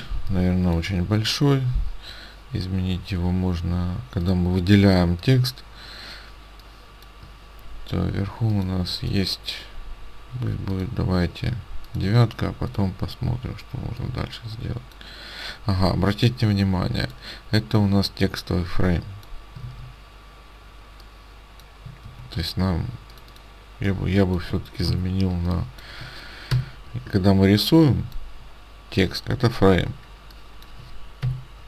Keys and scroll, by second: 19.7 ctrl+z, 22.1 ctrl+z, 25.0 ctrl+x, 26.6 Delete, 31.3 Delete.